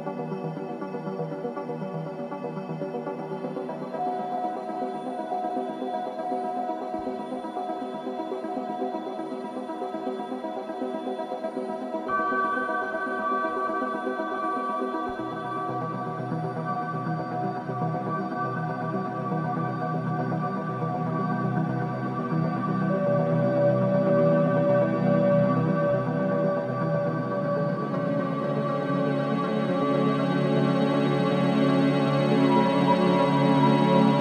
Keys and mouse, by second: 0.0 space, 0.5 click, 0.8 space, 2.4 space, 2.8 click, 3.1 space, 7.2 space, 9.5 click, 11.0-16.1 drag, 16.7-24.5 drag, 25.5 ctrl+s, 29.2-33.4 drag.